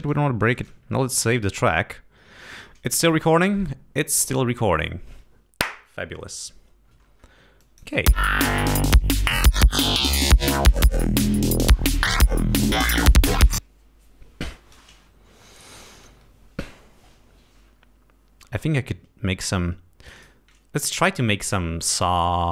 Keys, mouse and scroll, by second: 1.2 ctrl+s, 8.1 space, 8.2-8.5 scroll up 1, 9.7 scroll down 2, 15.2-15.9 scroll down 4, 18.5 space, 20.0 click.